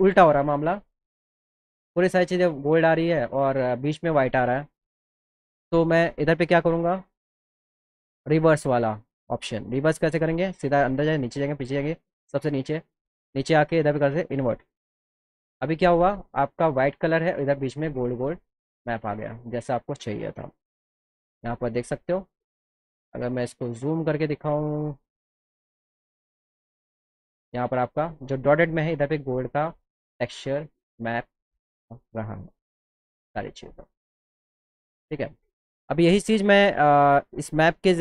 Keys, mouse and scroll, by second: 5.1 click, 7.7 click, 10.1 click, 10.8 click, 11.5 click, 12.2 click, 13.1 click, 14.1 click, 21.4 click, 22.5 click, 24.2 click, 26.2 click, 35.5 click, 37.7 click.